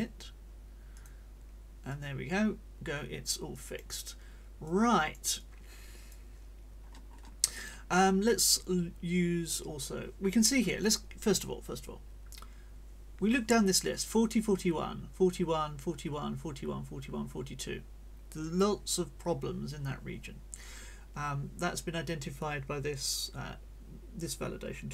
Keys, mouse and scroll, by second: 0.9 click, 1.9-3.9 drag, 4.7 click, 6.8-7.3 scroll up 2.